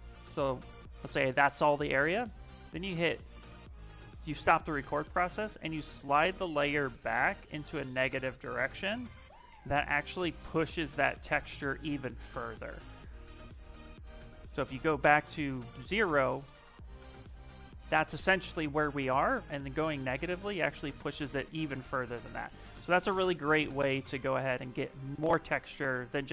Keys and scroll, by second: 23.7 ctrl+z, 24.3 ctrl+z, 25.0 ctrl+z, 25.7 ctrl+z.